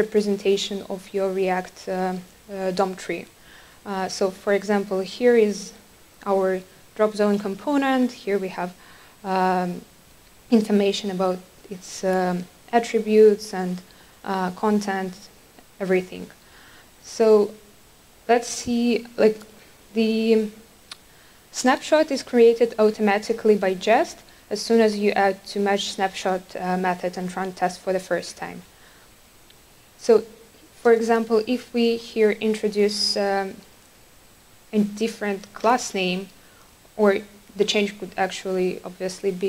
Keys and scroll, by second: 32.2 Return.